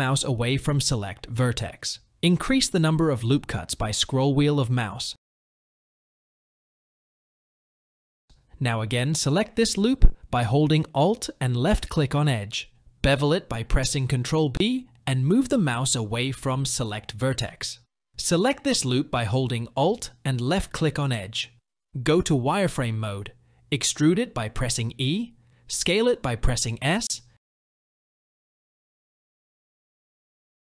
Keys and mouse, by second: 5.9 shift+middle click, 7.2 shift+click, 13.8 ctrl+b, 22.5 click, 24.0 e, 28.3 typing.